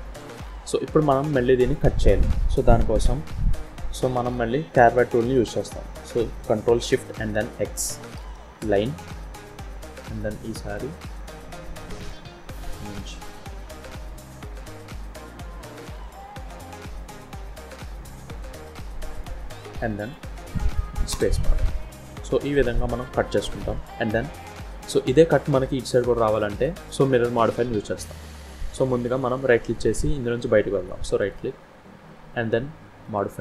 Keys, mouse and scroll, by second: 0.2 KP_7, 7.5 ctrl+shift+x, 9.5-9.9 scroll up 2, 9.9 shift+middle click, 21.8 scroll down 1, 22.0 middle click, 24.3 shift+middle click, 33.1 click.